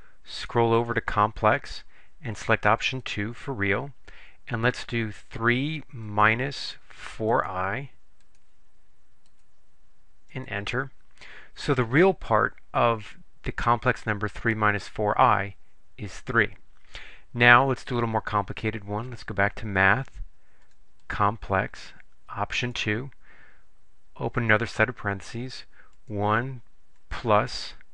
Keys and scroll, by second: 0.5 Right, 0.9 Right, 3.1 2, 5.3 3, 6.2 -, 7.4 4, 9.4 ., 10.4 Return, 20.7 Right, 21.1 Right, 22.7 2, 24.5 (, 26.1 1.